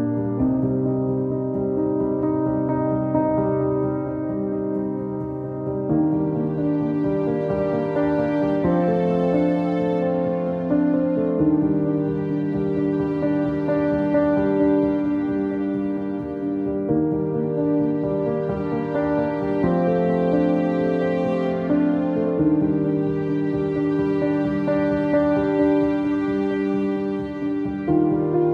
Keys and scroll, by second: 2.7 Down, 2.7 typing, 3.0 Return, 12.2-13.6 typing, 24.8 m.